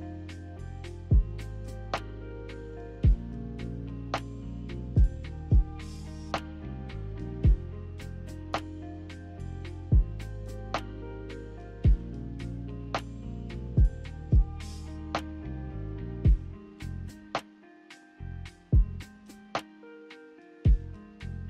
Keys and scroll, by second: 4.5 z, 10.3-11.2 typing.